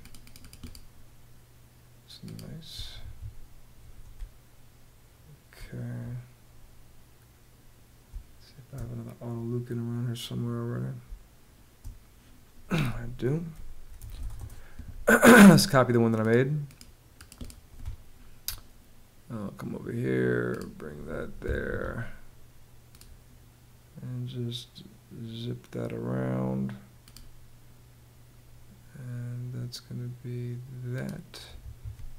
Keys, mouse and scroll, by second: 2.6 Escape, 3.7 space, 7.6 space, 10.6 space, 13.3-14.3 typing, 15.0 Return, 17.4 space, 21.2 Escape, 31.1 Escape.